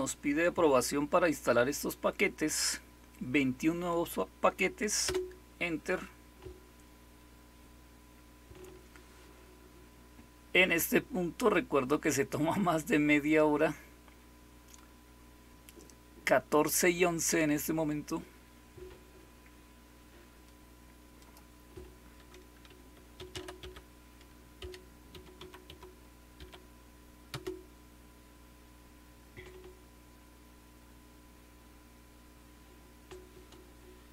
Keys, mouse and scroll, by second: 5.0 Return, 21.1 click, 22.4-26.3 typing, 27.2 Return.